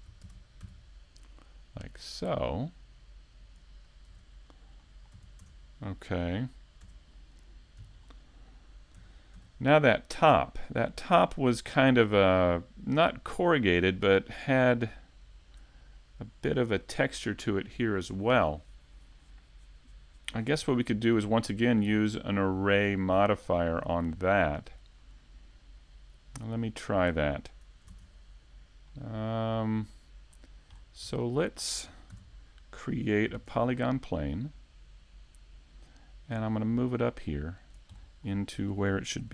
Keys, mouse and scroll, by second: 0.6 click, 2.4 middle click, 3.0 shift+middle click, 4.1 middle click, 4.1 shift+middle click, 4.5 middle click, 10.5 click, 12.5 middle click, 14.2 click, 14.9 click, 20.7 click, 24.6 middle click, 25.6 scroll down 2, 26.0 middle click, 27.9-30.4 click, 28.1 click, 30.4 shift+middle click, 30.8 scroll up 2, 31.4 i, 31.7 middle click, 32.1 shift+middle click, 34.6 click, 34.9 click, 36.2 shift+middle click, 37.4 middle click, 38.2 shift+middle click.